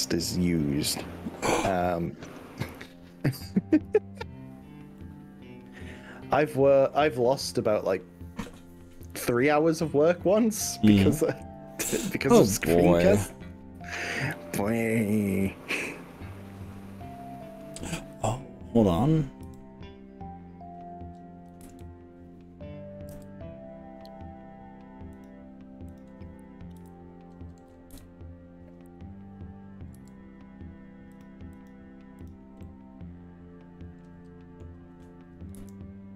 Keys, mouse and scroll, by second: 5.0-6.6 middle drag, 11.6-12.4 scroll up 6, 12.8-17.8 middle drag, 18.2 click, 19.6 g, 21.7 z, 23.1 y, 25.2 drag, 26.0 click, 26.8 g, 28.0 z, 30.0 y, 31.2 drag, 31.6 click, 32.4 click, 32.6-34.7 middle drag, 35.6 KP_1.